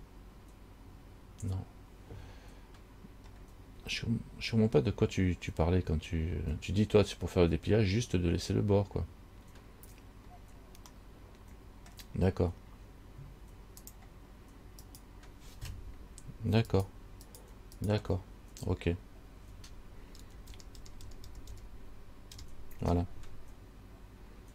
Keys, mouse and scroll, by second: 3.5-7.3 scroll down 7, 10.5-11.1 scroll down 1, 11.1 scroll down 1, 11.2 middle click, 11.7 middle click, 14.1 click, 15.2 right click, 16.9 shift+right click, 17.6 right click, 18.0 shift+right click, 19.1-20.4 scroll up 1, 20.4 ctrl+KP_Add, 20.8 ctrl+KP_Add, 21.0 ctrl+KP_Add, 21.3 ctrl+KP_Add, 21.6 ctrl+KP_Add, 21.7 ctrl+KP_Add, 22.6 ctrl+KP_Add, 24.1-24.5 scroll up 9.